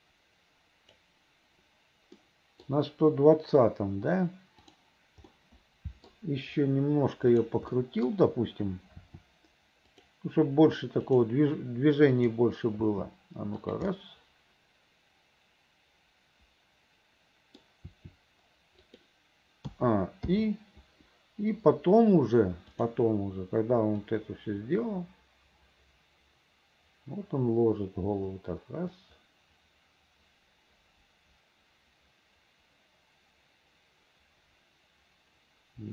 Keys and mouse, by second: 2.3 middle click, 4.7 click, 5.4 middle click, 7.8 middle click, 9.1 r, 11.2 click, 12.3 click, 12.9 r, 14.2-17.7 middle drag, 18.0 r, 19.8 a, 20.4 i, 22.8 click, 24.2-35.9 drag.